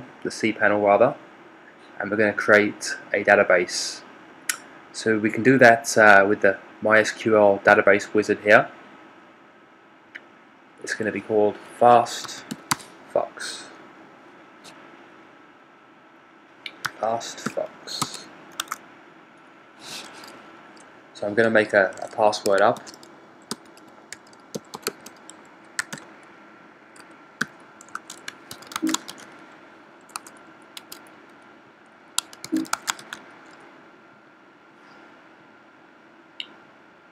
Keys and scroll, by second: 11.8-13.1 typing, 16.7-17.9 typing, 18.5 Tab, 19.7 typing.